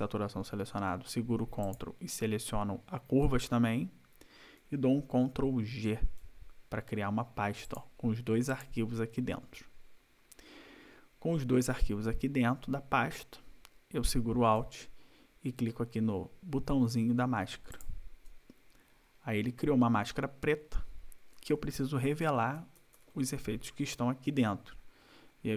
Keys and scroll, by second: 5.5 ctrl+g, 22.6 ctrl+=.